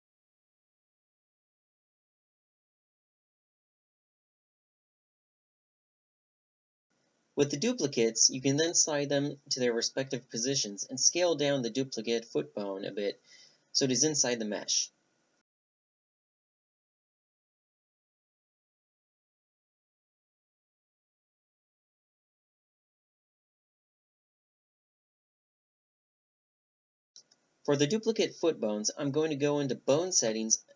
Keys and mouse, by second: 3.8 shift+d, 5.1-6.2 drag, 8.3-10.1 middle drag, 9.2 a, 10.1-11.2 right drag, 11.2-14.0 drag, 14.0 t, 15.3 click, 15.7-16.6 middle drag, 16.6 g, 18.2 click, 18.4 click, 18.6 click, 18.8 middle click, 18.8-21.0 typing, 19.1-19.6 drag, 21.3-21.6 drag, 21.6-22.7 middle drag, 22.1 a, 22.1 Tab, 23.1 click, 24.5 a, 24.6 Tab, 24.8 click, 24.9-25.3 middle drag, 25.4 click, 25.6-26.6 middle drag, 26.8 Tab, 27.0 click, 27.1 middle click, 27.1 z, 27.9-29.3 right drag, 29.8-30.7 drag.